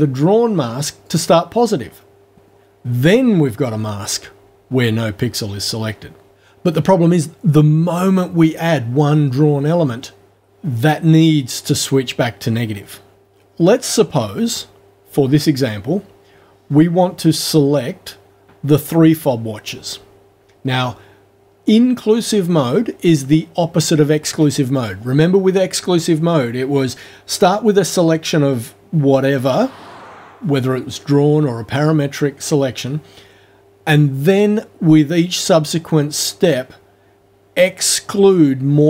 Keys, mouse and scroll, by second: 1.1 click.